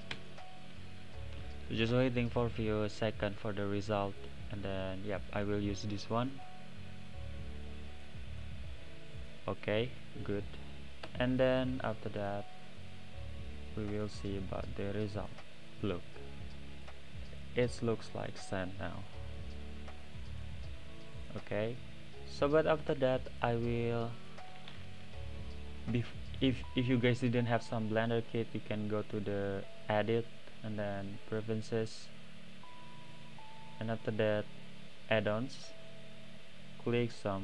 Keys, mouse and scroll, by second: 4.2 click, 10.2-11.9 drag, 12.1-12.8 drag, 14.2 drag, 14.9 click, 15.6 click, 16.8 click, 17.0 click, 17.6 click, 18.0-18.5 middle drag, 18.5-19.1 scroll up 1, 19.1-20.0 middle drag, 20.0-22.4 right drag, 20.8 middle click, 21.6 middle click, 22.4 click, 23.9-24.3 drag, 25.0-28.1 right drag, 25.0 middle click, 29.7-32.8 drag.